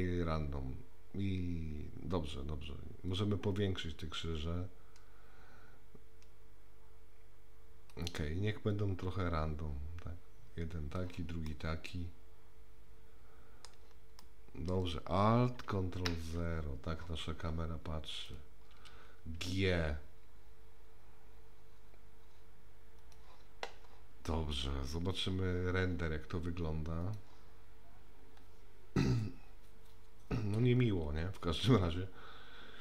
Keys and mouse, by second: 3.2-7.9 drag, 8.7-11.0 drag, 11.5-13.7 middle drag, 14.2 middle click, 15.8 ctrl+a, 18.2 click, 19.3 g, 27.2 click.